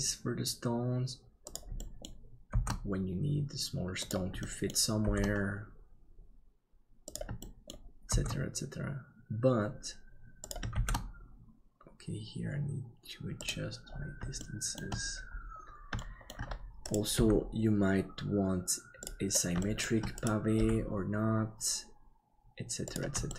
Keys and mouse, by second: 1.7 middle click, 4.4 middle click, 5.3 shift+d, 7.5 middle click, 14.5 shift+middle click, 16.0 shift+middle click, 17.1 g, 19.7 shift+middle click, 20.6 g.